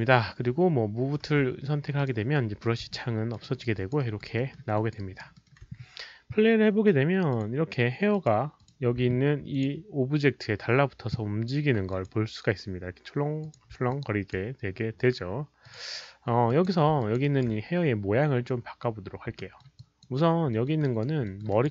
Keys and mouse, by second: 1.2 w, 1.9 alt+click, 1.9 alt+right click, 1.9 alt+middle click, 1.9 w, 2.9-3.3 alt+drag, 3.4 alt+right drag, 3.6 alt+w, 3.7 alt+click, 3.9 alt+right drag, 4.2 w, 4.3 alt+middle drag, 4.7 alt+click, 4.9 alt+right drag, 5.3 alt+middle click, 7.3 alt+click, 7.3 w, 8.1 alt+click, 8.5 click, 9.5 alt+click, 11.9 alt+click, 11.9 alt+middle click, 11.9 alt+right click, 13.1 alt+middle click, 13.1 alt+right click, 13.4 click, 13.5 alt+middle click, 13.5 alt+right click, 13.9-14.3 alt+drag, 15.6 alt+click, 16.4 alt+click, 17.0 alt+click, 17.2 alt+right drag, 18.9 alt+right click, 19.3 alt+middle drag, 19.7 alt+click, 20.5 alt+middle click, 20.7 alt+right drag, 21.2 alt+middle drag, 21.5 alt+right drag.